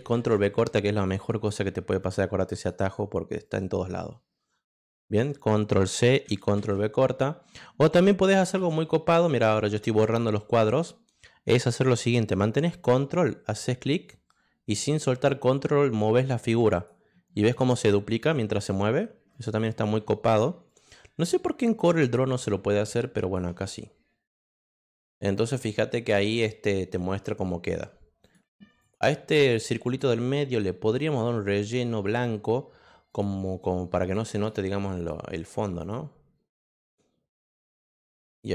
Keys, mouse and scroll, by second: 0.2 ctrl+v, 0.9 click, 2.0 click, 2.5 click, 3.4-4.8 drag, 6.3 ctrl+c, 6.5 ctrl+v, 8.6 ctrl+z, 9.3 ctrl+z, 13.4-16.8 drag, 17.8 ctrl+click, 19.3 click, 20.6-23.3 ctrl+drag, 24.6 click, 28.2 click, 28.8 click, 29.3 click, 29.8 click, 31.6 click, 33.1 click, 34.3 click, 34.9 click, 35.8 click, 36.7 click, 37.9 click, 38.4 click.